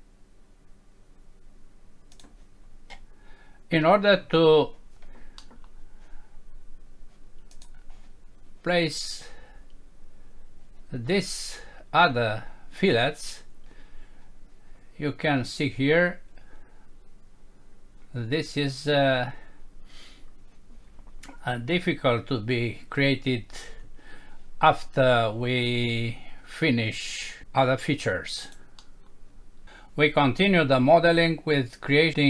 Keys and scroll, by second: 5.4 F6, 28.8 F6.